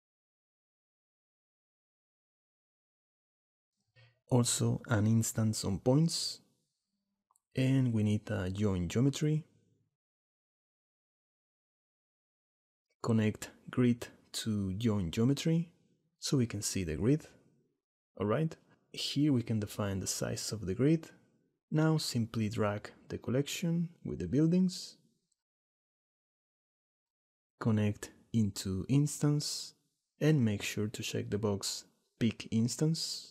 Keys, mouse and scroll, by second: 3.2 shift+a, 7.7 shift+a, 13.6-15.1 drag, 19.1-20.2 drag, 20.9-21.9 drag, 24.4 click, 25.9 middle click, 28.5-29.8 drag, 31.3 click, 32.2 middle click.